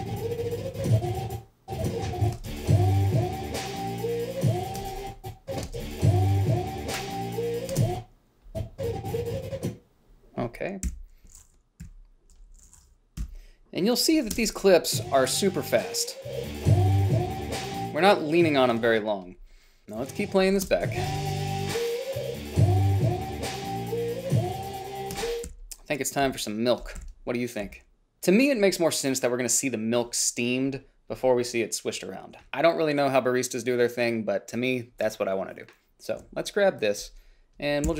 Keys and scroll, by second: 2.6 space, 5.0 space, 8.0 space, 11.1 g, 12.1 -, 13.4 Delete, 14.6 space, 18.9 space, 21.0 space, 25.5 space, 25.9 h, 27.3 h.